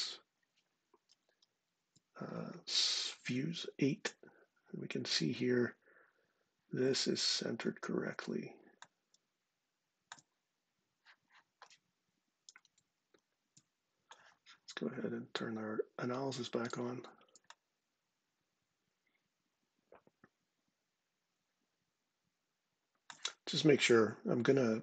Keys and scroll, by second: 0.8 ctrl+8, 12.2 ctrl+5, 12.8 ctrl+6.